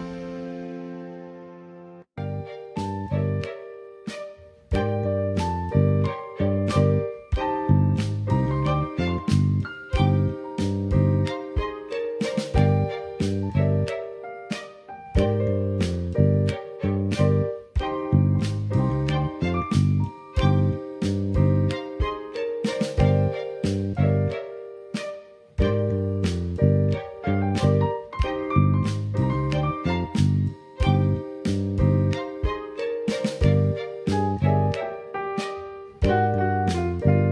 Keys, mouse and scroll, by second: 0.6 click, 1.4 middle click, 3.0 click, 3.7 middle click, 4.5-5.2 scroll up 1, 5.5 Tab, 7.5 2, 7.7 click, 9.1 ctrl+b, 16.6 click, 18.2 Tab, 19.3-20.5 middle drag, 21.7 click, 22.1 Tab, 23.0 click, 24.0 ctrl+b, 27.4 click, 28.2 Tab, 29.0-32.4 middle drag, 32.8-33.7 scroll up 2, 33.7 scroll up 1, 34.0 shift+middle click, 34.7 middle click.